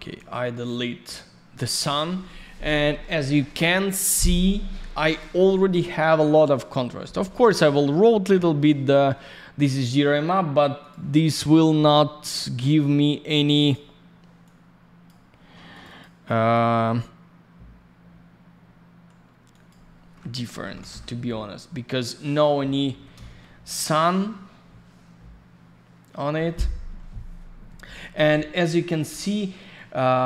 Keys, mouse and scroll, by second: 0.6 Delete, 5.0 right click, 6.8 middle click, 8.5 middle click, 10.7 click, 10.8 click, 12.2 click, 13.5 click, 13.7 click, 14.4 click, 15.3-15.7 scroll up 1, 15.7 click, 15.8 click, 15.9 double click, 16.2 click, 19.5 click, 19.6 click, 20.6 typing, 20.8 Return, 22.7-23.5 typing, 28.5-28.9 scroll up 1, 29.5 middle click.